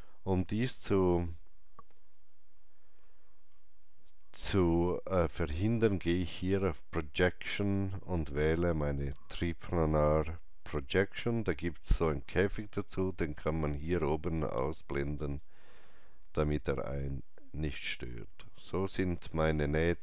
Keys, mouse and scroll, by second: 2.0 alt+middle click, 2.0 alt+click, 2.0 scroll up 1, 7.2 click, 7.2-9.1 scroll up 1, 9.1 click, 15.2 click.